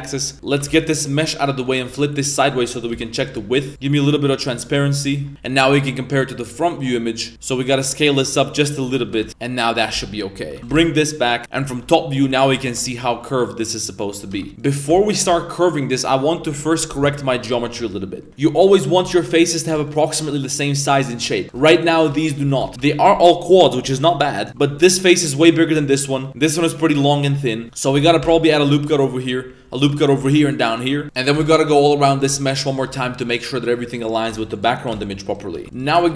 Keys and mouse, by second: 0.3 middle click, 0.3 z, 0.5 g, 1.3 middle click, 1.6 right click, 2.9 KP_3, 3.2 KP_1, 3.8 click, 5.7 shift+middle click, 6.6 click, 7.3 s, 9.0 g, 9.4 middle click, 9.7 r, 10.6 g, 11.7 KP_7, 12.6 Tab, 13.0 a, 14.3 Tab, 14.5 a, 14.5 3, 14.6 right click, 15.1 ctrl+shift+right click, 16.4 2, 18.7 right click, 19.3 right click, 19.5 right click, 19.8 shift+right click, 20.2 shift+right click, 20.7 shift+right click, 20.9 shift+right click, 21.3 middle click, 21.4 right click, 21.7 shift+right click, 21.9 shift+right click, 22.5 shift+middle click, 22.7 3, 24.7 g, 25.5 right click, 28.2 ctrl+r, 29.1 middle click, 30.3 ctrl+r, 31.0 right click, 31.0 z, 31.3 g, 32.1 right click, 33.5 right click, 33.8 g, 34.1 right click, 34.8 right click, 34.8 g, 35.6 a, 35.7 right click.